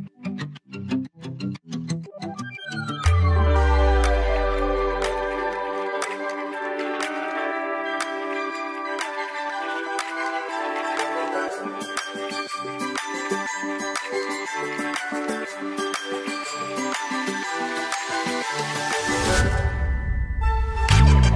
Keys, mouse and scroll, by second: 0.0 click, 5.6 ctrl+d, 7.2 click, 8.0 ctrl+t, 9.2-21.3 ctrl+drag.